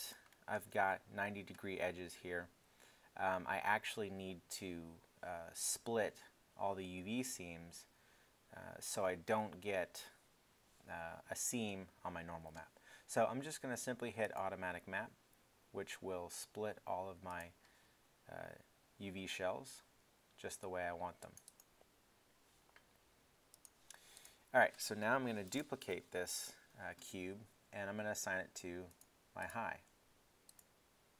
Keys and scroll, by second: 25.5 super+d.